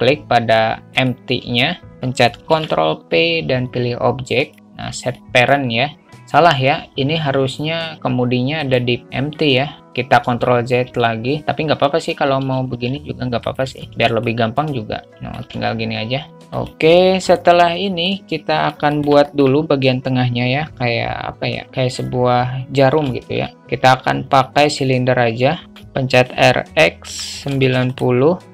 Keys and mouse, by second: 2.8 ctrl+p, 5.5 alt+middle click, 6.0 ctrl+z, 10.5 ctrl+z, 11.2 ctrl+z, 12.9 ctrl+shift+z, 13.7 click, 14.9 click, 15.8 ctrl+z, 16.3 a, 16.8 click, 18.5 click, 19.2 click, 19.4 shift+a, 19.6 shift+middle click, 19.7 shift+a, 23.5 shift+a, 25.9 alt+shift+middle click, 26.6 r.